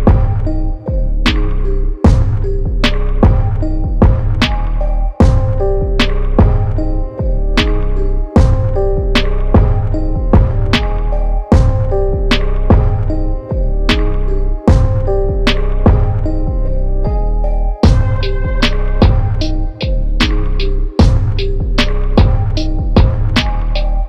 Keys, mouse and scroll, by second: 0.1 KP_0, 1.1 Tab, 1.6 KP_6, 1.8 KP_0, 2.0 Tab, 2.8 KP_4, 3.1 KP_0, 3.4 Tab, 4.7 click, 7.4 click, 8.8 click, 9.1 KP_1, 9.3 KP_5, 10.3 Tab, 12.1 KP_2, 12.3 KP_5, 12.6 KP_0, 13.2 click, 14.3 KP_9, 14.5 KP_0, 16.4 click, 18.0 click, 21.3 click, 23.6 click, 23.8 KP_2.